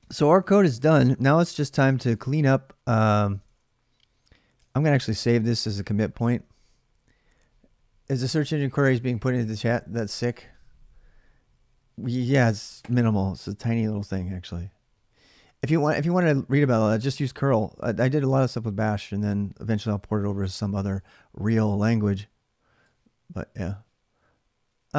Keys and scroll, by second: 0.0-2.8 typing, 3.2 ctrl+[, 3.2 ctrl+j, 4.4 ctrl+[, 4.4 ctrl+j.